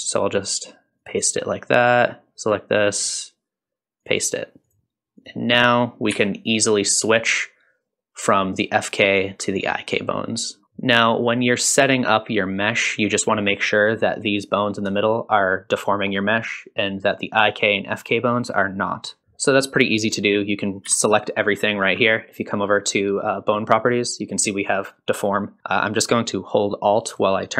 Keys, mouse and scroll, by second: 1.8 click, 2.9-4.1 right drag, 4.6 click, 5.2 click, 6.1 g, 13.8 click, 14.4 click, 14.9 shift+click, 15.7-16.0 shift+drag, 16.8 click, 20.9 a, 23.6 click.